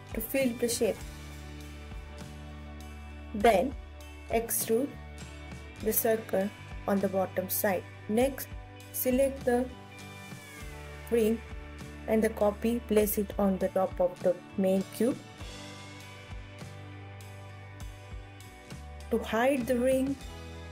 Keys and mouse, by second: 0.6 KP_1, 2.0 e, 5.8 ctrl+s, 5.8 KP_1, 6.4 click, 7.6 shift+d, 13.4 click, 14.4 KP_7, 14.4 ctrl+s, 14.8 click, 19.1 h, 20.0 click.